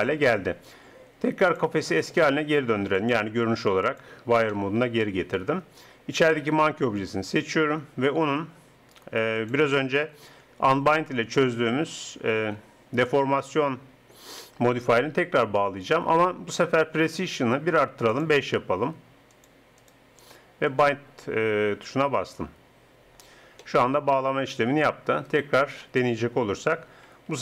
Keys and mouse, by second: 1.6-4.9 drag, 4.9-6.1 middle drag, 6.1 right click, 6.7-9.4 middle drag, 9.4-11.2 drag, 18.1-22.9 drag, 23.6-25.3 middle drag, 25.3-26.7 right drag, 26.7 click, 26.7 r.